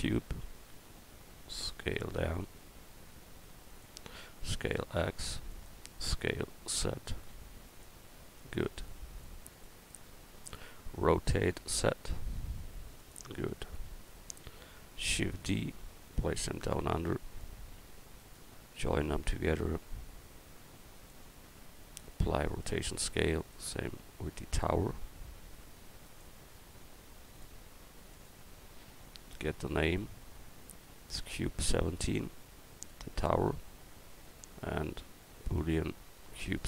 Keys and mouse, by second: 0.4 s, 3.1 s, 4.3 s, 6.1 s, 8.5-9.6 drag, 11.4 r, 13.7 click, 15.1 shift+d, 18.2 right click, 18.6-19.8 right drag, 19.3-19.8 drag, 30.5-31.5 right drag, 32.1-34.2 drag, 34.2-35.6 right drag.